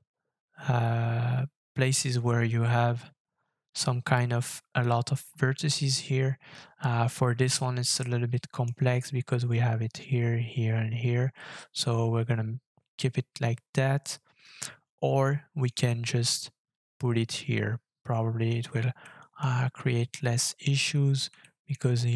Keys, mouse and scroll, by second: 1.9 scroll down 2, 2.8-3.5 scroll down 6, 5.2 scroll up 1, 6.3 scroll up 4, 6.9-7.3 scroll down 6, 7.5 shift+middle click, 11.4 shift+middle click, 19.2 shift+middle click, 19.5-20.8 shift+scroll up 6, 20.8-21.3 scroll up 3, 21.4 shift+middle click.